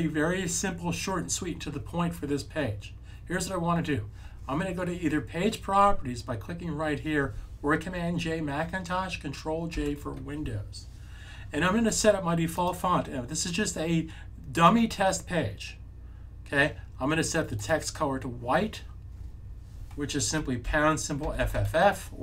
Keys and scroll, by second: 9.6 super+j, 20.6-21.4 typing.